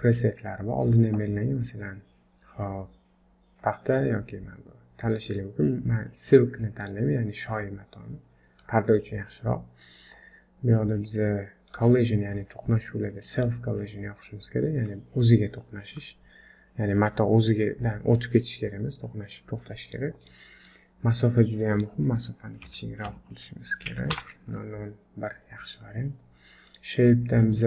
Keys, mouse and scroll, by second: 7.9-8.3 scroll down 9, 8.6-8.9 scroll up 2, 8.9 scroll down 1, 9.2-9.7 scroll down 1, 11.3-11.6 scroll down 7, 12.0 click, 12.0 scroll down 2, 13.4 click, 19.9 click, 25.4-26.7 scroll up 2, 26.7 click, 26.7-27.1 scroll up 1, 27.1-27.6 scroll down 1.